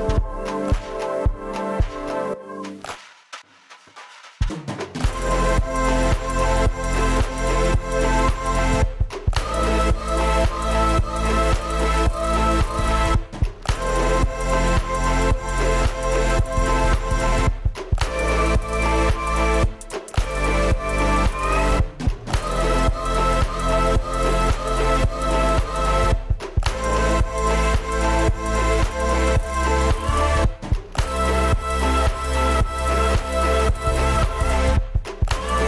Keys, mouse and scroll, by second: 0.3 middle click, 0.8 scroll up 2, 0.8 middle click, 1.4 s, 2.0 0, 2.4 BackSpace, 2.6 1, 2.7 Return, 13.6-14.5 typing, 14.1-14.7 scroll up 3, 15.3 shift+click, 15.4 scroll down 5, 15.5 middle click, 15.9-16.2 scroll up 2, 16.8 shift+click, 16.8 scroll down 8, 24.4 y, 24.6 middle click, 25.0 middle click, 28.2 middle click, 28.3 scroll down 8, 28.5 scroll up 6, 32.0 middle click, 32.2 scroll down 6, 32.5 shift+middle click, 32.5 scroll up 1, 35.4 scroll down 5, 35.4 middle click.